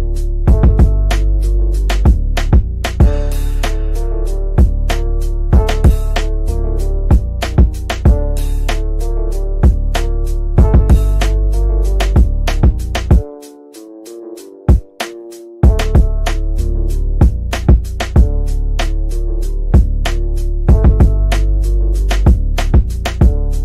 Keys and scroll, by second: 0.9 Delete, 4.3 Delete, 5.0 shift+F2.